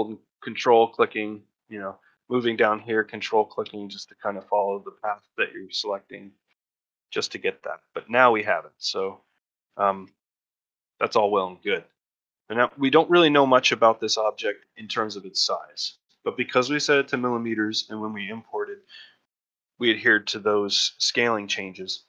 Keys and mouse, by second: 1.3 shift+middle click, 1.8 shift+middle click, 3.4 shift+middle click, 4.6 shift+middle click, 6.4 ctrl+middle click, 6.7 ctrl+middle click, 7.0 shift+middle click, 7.4 middle click, 7.7 middle click, 8.7 shift+middle click, 9.0 middle click, 10.0 shift+middle click, 10.6 ctrl+shift+middle click, 11.9 a, 13.5 middle click, 13.8-14.9 ctrl+shift+middle drag, 15.4 middle click, 15.7 shift+middle click.